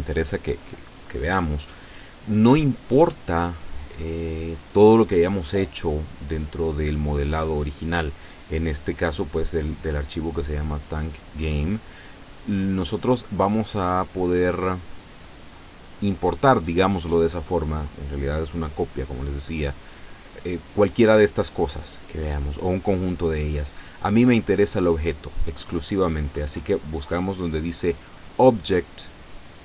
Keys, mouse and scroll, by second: 28.7 click.